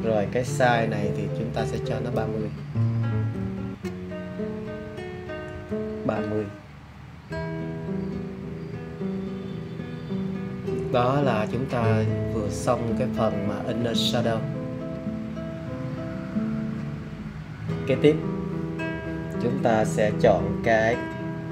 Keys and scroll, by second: 3.1 3, 3.3 0.